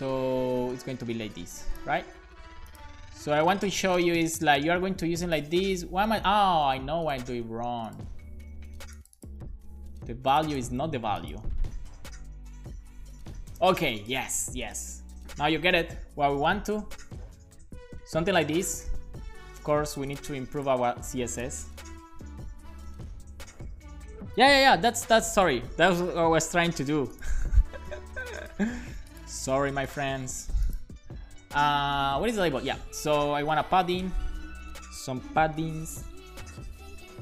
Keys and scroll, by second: 2.0 super+v, 2.2 super+s, 9.5 super+c, 10.7 super+v, 11.0 super+s, 33.1-37.2 typing.